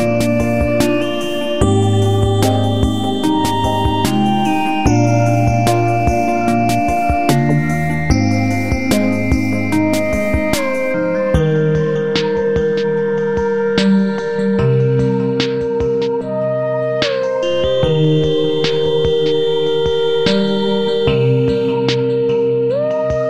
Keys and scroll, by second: 0.8 ctrl+g.